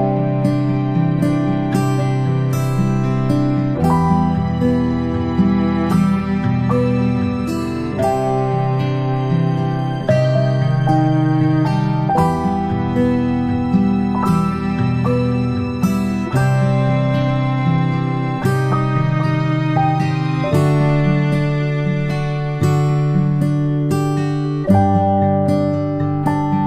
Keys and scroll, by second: 5.2-5.6 space, 6.9 space, 7.1 space, 8.5 a, 12.4 ctrl+shift+[, 12.9 ctrl+], 17.8 p, 24.4 ctrl+z, 24.7-26.6 ctrl+z.